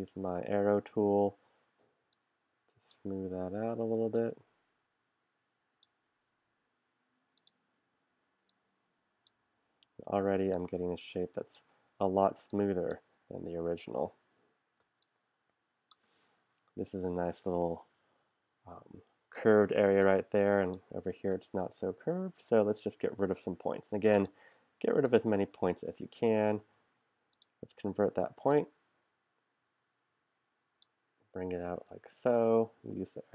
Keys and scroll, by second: 0.0 z, 0.4 a, 14.8 space, 19.9 space, 23.0 p, 26.5 shift+c, 32.8 a.